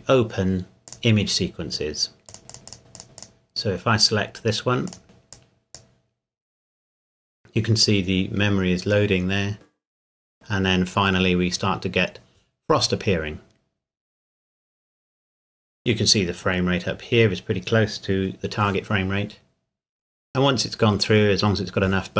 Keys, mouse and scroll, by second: 2.5 click, 3.2 click.